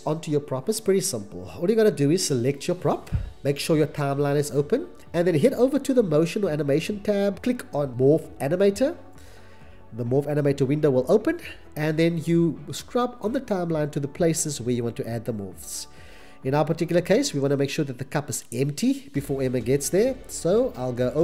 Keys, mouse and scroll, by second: 15.5 click, 17.8 click.